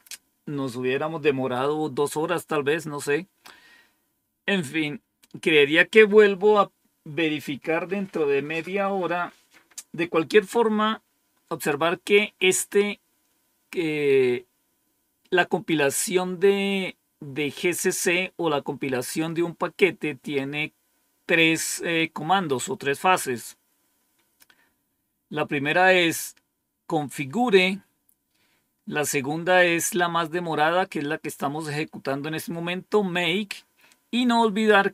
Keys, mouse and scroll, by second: 23.1-23.7 scroll down 1, 24.1-24.7 scroll down 1, 24.7-25.4 scroll down 1, 27.9-28.5 scroll down 1, 28.5-34.4 scroll down 1.